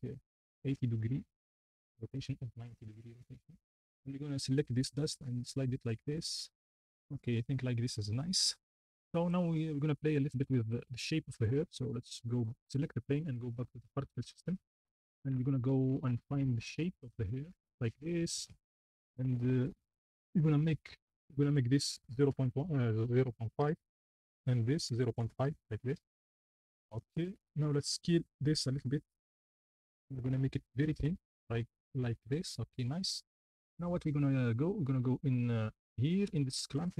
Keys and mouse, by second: 3.6-4.9 shift+middle drag, 6.2-8.1 middle drag, 17.0-18.1 drag, 21.5-23.7 drag, 30.4 shift+middle click.